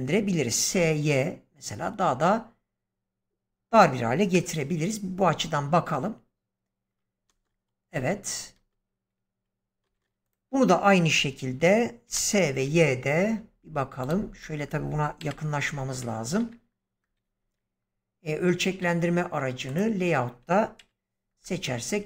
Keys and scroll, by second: 0.6 y, 4.2 0, 7.2 space, 12.0 s, 12.5 y, 15.1 ,, 20.7 ,.